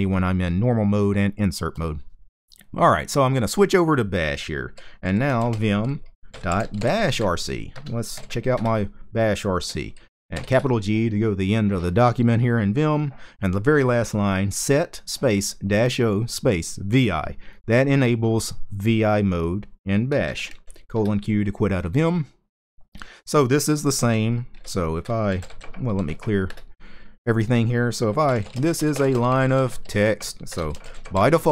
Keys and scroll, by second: 4.5-7.9 typing, 8.2 Return, 10.0 shift+g, 19.9 typing, 20.6 Return, 24.8-26.3 typing, 27.6-31.5 typing.